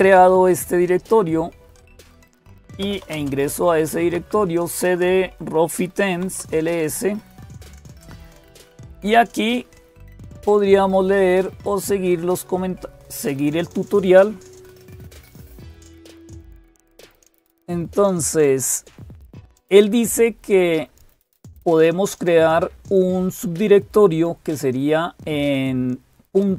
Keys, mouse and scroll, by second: 0.0-26.5 typing, 4.8 Return, 11.7 click, 13.1 click.